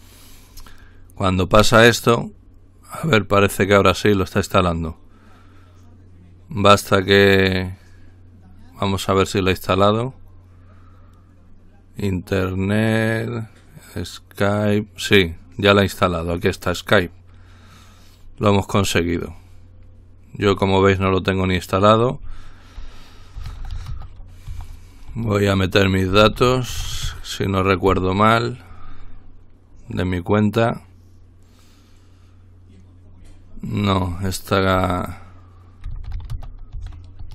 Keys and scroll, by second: 23.2-27.8 typing, 35.8-37.3 typing.